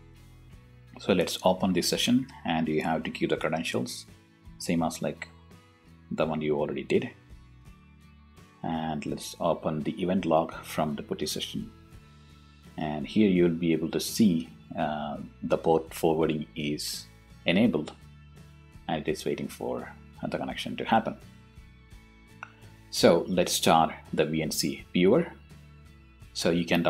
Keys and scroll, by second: 4.1 o, 4.5 t, 4.6 Return, 6.2 o, 7.0 Return.